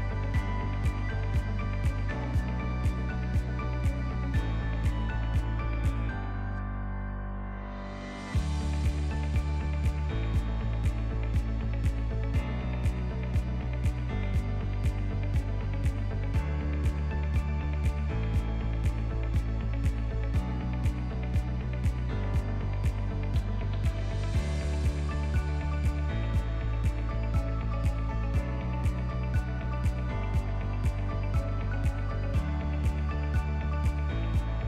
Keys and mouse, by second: 0.3 g, 5.7 click, 6.9-10.0 shift+drag, 10.7 middle click, 11.2 KP_1, 11.9 ctrl+click, 12.3 shift+click, 12.9 1, 13.4 alt+z, 13.9 shift+click, 14.2 ctrl+click, 15.1 click, 15.8 g, 17.2 click, 17.6 g, 21.6 shift+middle click, 21.9 ctrl+middle click, 22.7 shift+middle click, 22.9 e, 25.3 shift+click, 25.4 shift+middle click, 25.7 s, 27.1 g, 28.7 shift+middle drag, 29.1 ctrl+middle click, 29.7 shift+middle click, 30.3 e, 34.2 right click.